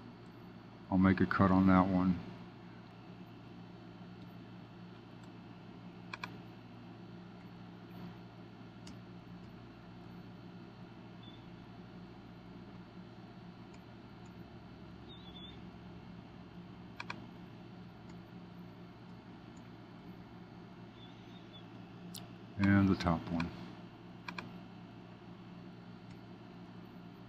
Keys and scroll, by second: 0.2 super+b, 4.1 Up, 7.3 Up, 7.8 super+b, 8.8 Up, 10.0 super+b, 13.7 Up, 18.0 Up, 18.5 super+b, 19.0 Up, 19.9 super+b, 26.0 Up, 26.7 super+b.